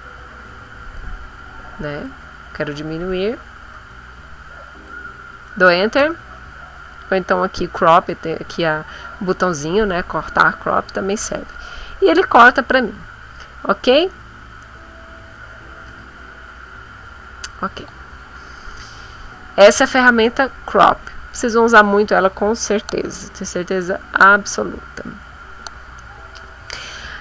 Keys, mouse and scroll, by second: 0.9-2.2 drag, 3.7-5.0 drag, 5.9 Return, 15.8 ctrl+z.